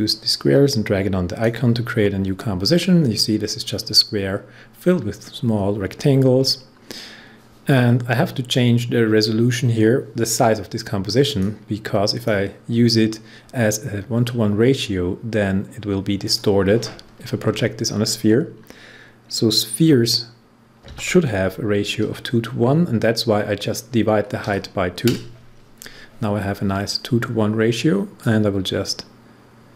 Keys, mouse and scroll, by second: 2.5 scroll down 1, 4.4 scroll up 1, 11.2 click, 16.2 click, 17.4 Right, 20.8 shift+/, 24.4 2, 28.1-29.7 drag.